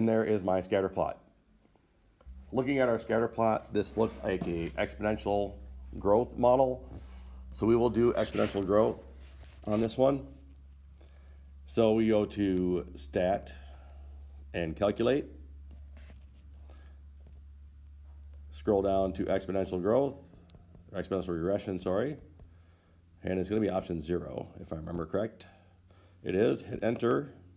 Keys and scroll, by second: 17.6 Right, 20.3 Down, 20.8 Down, 21.0 Down, 22.1 Down, 22.4 Down, 23.8 Down, 24.0 Down, 27.2 Return.